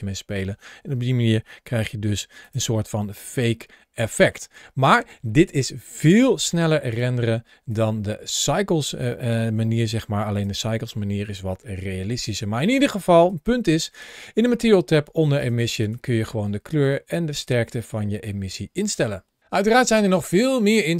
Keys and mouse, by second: 1.4 g, 2.2 click, 2.6-4.1 middle drag, 6.7-7.9 drag, 9.3 g, 10.1 click, 10.6 middle click, 13.0 click, 15.2 click, 15.6 click.